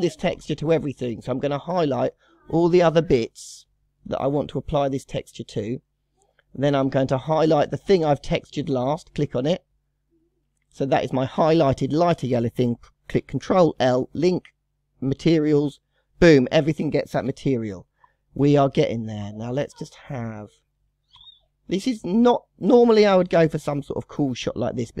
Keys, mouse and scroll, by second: 0.7 click, 1.7 shift+click, 2.4 shift+click, 2.9 shift+click, 3.4 scroll up 1, 3.5 scroll down 3, 3.7-4.2 middle drag, 4.2 scroll up 2, 4.5-6.6 middle drag, 6.6-6.9 scroll up 4, 6.9-7.9 middle drag, 7.9-9.6 scroll up 2, 9.6 shift+click, 10.8 scroll down 2, 13.5 ctrl+l, 16.4 click, 17.2 KP_0, 17.9-18.4 scroll up 3, 19.2-22.5 shift+middle drag, 22.5-23.2 scroll down 6, 23.2-24.2 middle drag, 24.2-25.0 scroll down 2.